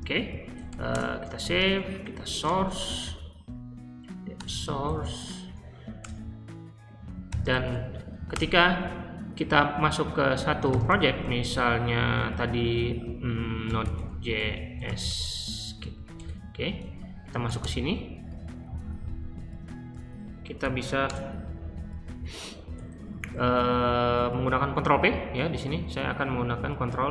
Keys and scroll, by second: 0.0-5.4 typing, 5.4 Up, 6.0 Return, 7.0-8.1 typing, 8.2 Return, 10.2-11.6 typing, 13.3-15.5 typing, 15.8 Right, 16.1 Return, 17.0-19.1 typing, 19.1 Left, 19.2 Left, 19.8 Left, 20.3-21.2 typing, 22.4-23.2 typing.